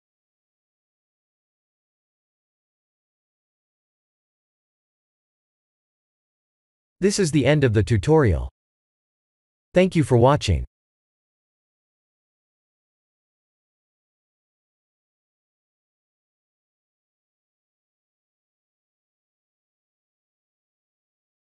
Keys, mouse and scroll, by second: 6.4 click, 7.7 middle click, 9.9 middle click, 11.0 KP_1.